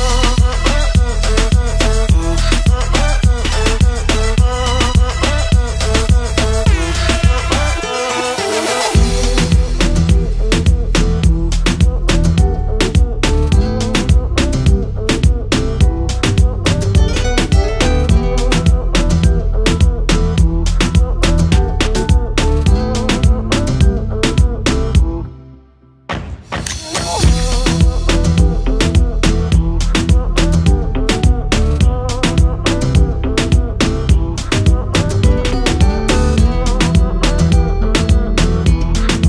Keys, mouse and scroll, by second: 0.4 click, 3.2 click, 5.6 click, 6.6 click, 8.5 click, 11.0 click, 11.5 BackSpace, 11.9 Return, 13.9 click, 13.9 double click, 14.1 click, 14.2 double click, 15.5 click, 17.9 click, 19.7 click, 21.4 click, 23.6 click, 24.8 click, 28.2 Right, 28.3 Right, 30.0 click, 32.6 ctrl+click, 34.0 click, 35.4 click, 37.2 click, 38.1 click.